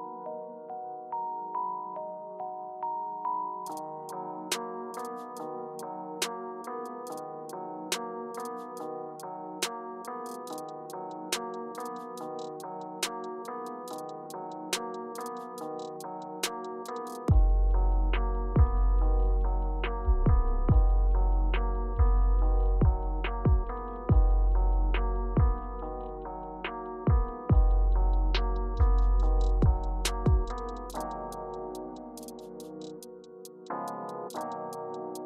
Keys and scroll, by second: 14.1 super+d, 14.5 super+d, 14.9 super+d, 20.3 super+d, 26.2 Caps_Lock, 27.1 Page_Up, 28.0 Page_Down, 28.5 Return, 31.7 r.